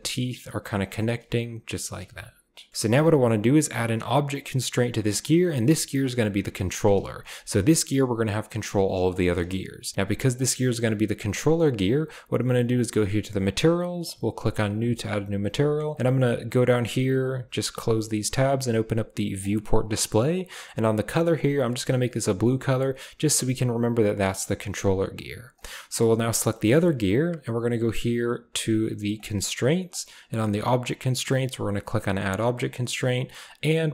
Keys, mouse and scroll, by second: 1.9 g, 5.4 click, 7.2 r, 9.9 g, 11.5 click, 13.3 click, 15.9 click, 17.2 drag, 19.4 click, 26.5 shift+click, 29.9 click, 31.3-33.9 drag.